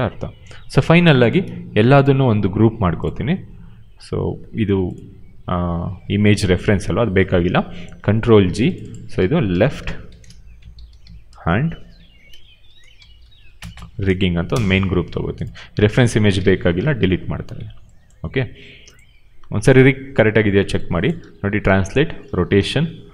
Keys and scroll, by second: 8.0 ctrl+g, 9.4-14.1 typing, 14.4 Return, 16.7 Delete, 19.2 w, 21.1 ctrl+z, 21.5 e, 22.2 ctrl+z, 22.4 r.